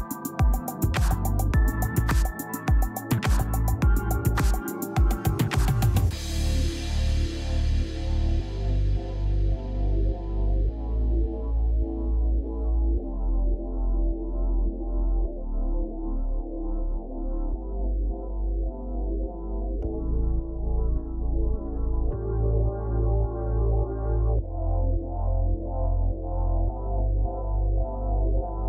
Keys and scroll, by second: 10.8 space, 12.9 space.